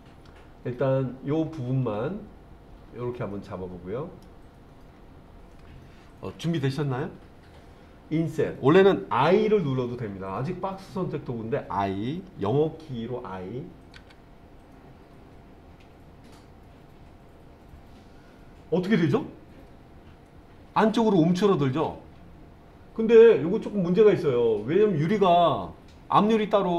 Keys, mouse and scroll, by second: 4.9-8.0 scroll up 2, 14.0 i.